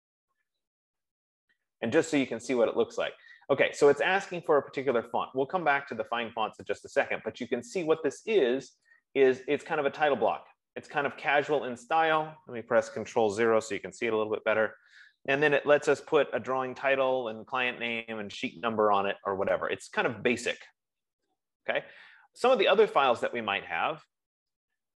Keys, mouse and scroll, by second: 3.5 F15, 5.5 click, 7.2 click, 9.3 click, 14.2 ctrl+0.